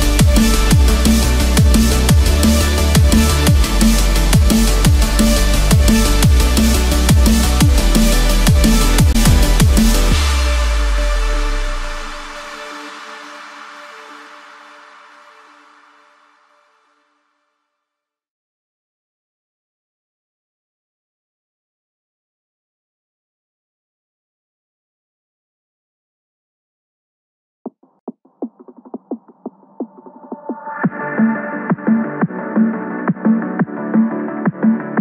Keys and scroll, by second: 28.7 ctrl+-, 29.3 ctrl+=.